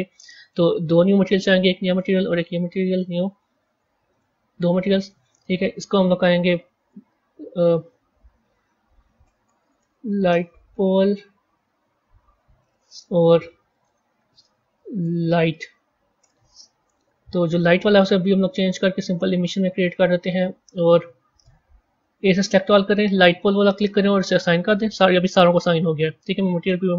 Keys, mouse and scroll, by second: 0.3-3.0 drag, 4.0-5.0 drag, 5.1-8.2 drag, 13.6 click, 13.7-16.9 drag, 17.8-20.8 drag, 21.6 a, 21.9 a, 23.0 click, 24.2-25.9 drag, 25.9 z.